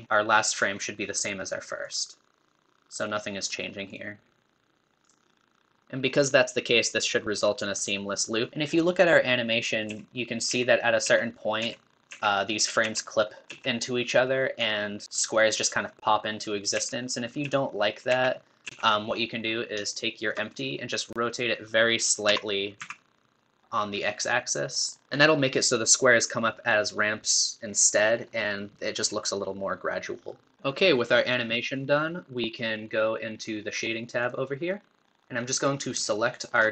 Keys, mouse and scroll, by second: 0.0 scroll down 1, 2.2-5.8 drag, 8.5 Right, 10.2 Left, 11.9 Left, 12.4 Right, 13.2 Right, 13.8 Left, 19.3 scroll down 2, 19.9-21.0 shift+middle drag, 21.0-22.2 drag, 22.2 r, 34.3 click.